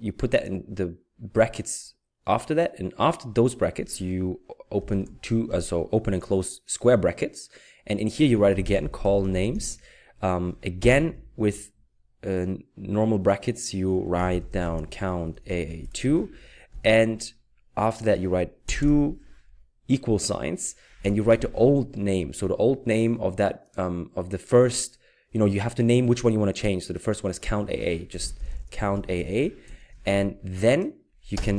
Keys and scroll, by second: 4.9 [, 8.3-10.8 typing, 14.2-16.7 typing, 18.6 typing, 21.3 typing, 27.8-29.7 typing.